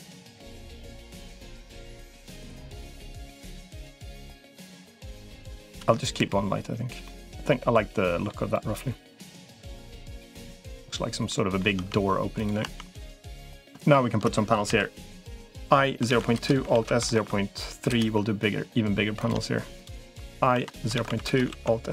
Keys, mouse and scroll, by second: 1.8-4.0 middle drag, 4.8 click, 6.0 Delete, 6.8 middle click, 7.3 middle click, 8.3-9.4 middle drag, 9.7 middle click, 11.1 middle click, 11.6 Tab, 12.4 Tab, 13.6 shift+click, 14.6 i, 16.6 alt+s, 19.0 click, 20.4 i, 21.4 alt+s.